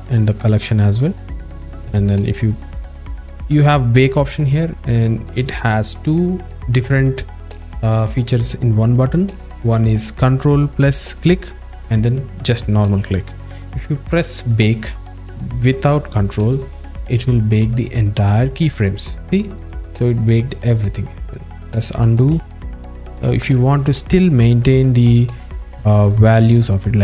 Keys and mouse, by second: 0.4 alt+middle click, 17.2 click, 19.6-20.8 drag, 22.5 z, 26.2 ctrl+a.